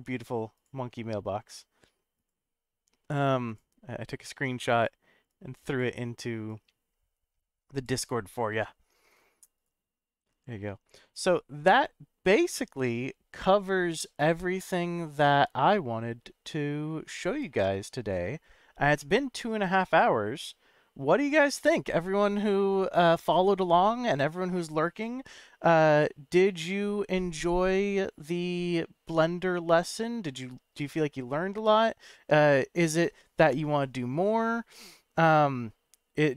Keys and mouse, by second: 19.9-20.8 middle drag, 30.9-31.7 middle drag.